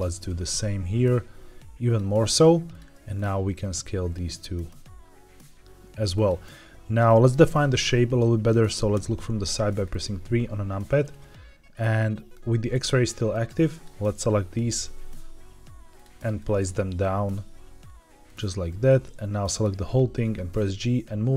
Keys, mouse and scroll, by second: 0.2 s, 1.8 click, 2.6 click, 3.0 shift+click, 3.5 s, 6.0 click, 8.8 KP_3, 9.6-11.9 scroll up 5, 13.2 click, 14.6 g, 15.9 click, 16.3 click, 16.7 g, 18.6 click, 19.9 g.